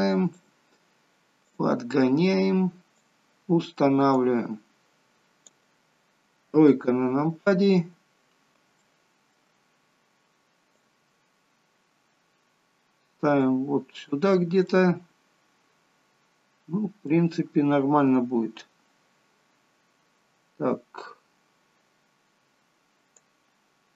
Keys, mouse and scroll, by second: 1.5 click, 4.2 click, 6.4 KP_3, 7.7-8.5 scroll up 1, 8.5-8.9 scroll up 2, 8.9 shift+middle click, 10.7 click, 14.4-14.7 scroll up 1, 14.7 middle click, 23.1 click.